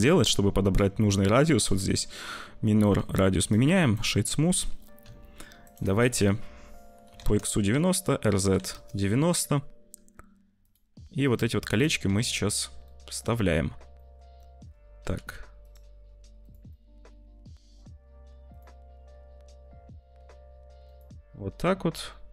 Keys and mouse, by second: 3.5 click, 5.0 s, 5.7 r, 7.6 r, 9.3 `, 9.9 g, 10.9 s, 12.0 `, 12.7 middle click, 13.3 middle click, 13.9 click, 14.4 shift+click, 14.9 g, 16.0 s, 16.7 click, 19.0 s, 19.0 `, 20.1 g.